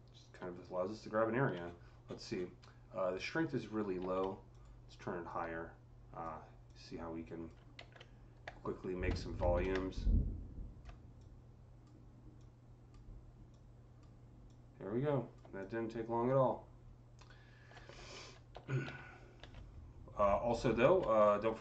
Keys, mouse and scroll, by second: 1.4-2.7 ctrl+scroll up 13, 3.9 ctrl+z, 4.4 click, 5.1-18.7 drag, 7.6 ctrl+z, 9.2 ctrl+z, 12.2 typing, 18.0 ctrl+z, 18.4 ctrl+z, 18.7 ctrl+z, 20.4 alt+click, 21.5-21.6 ctrl+drag.